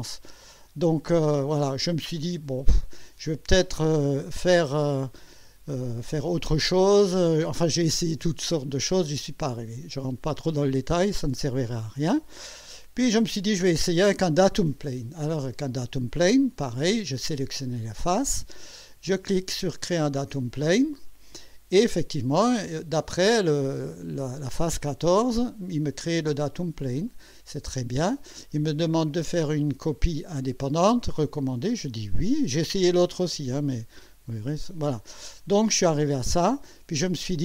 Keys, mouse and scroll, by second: 1.5 click, 9.7 click, 12.5 scroll down 1, 17.4 click, 20.9 click, 27.1 click, 34.0 click, 35.1 scroll down 1, 36.0-37.4 drag.